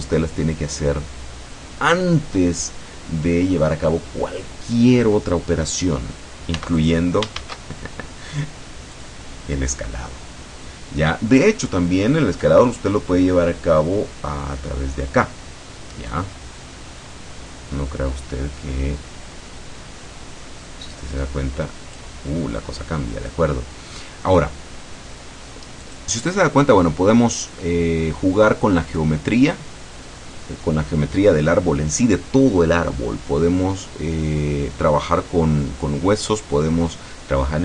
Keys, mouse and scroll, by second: 6.6 x, 6.8 click, 7.4 shift+a, 9.0 click, 14.4-15.3 scroll down 4, 16.2-22.3 drag, 23.9-24.3 scroll up 2, 25.9 click.